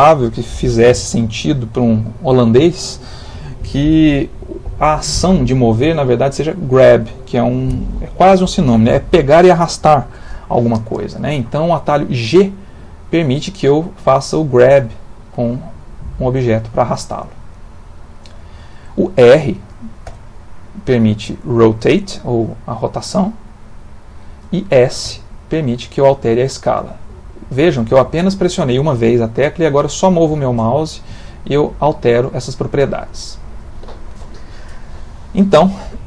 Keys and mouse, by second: 11.6 middle click, 14.9 g, 20.1 r, 25.1 s.